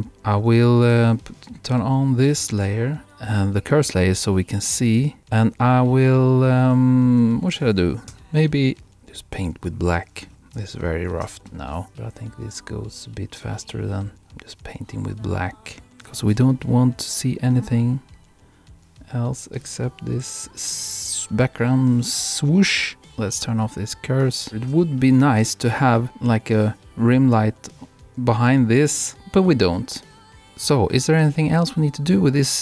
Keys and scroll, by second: 10.6 super+-, 25.5 super+-.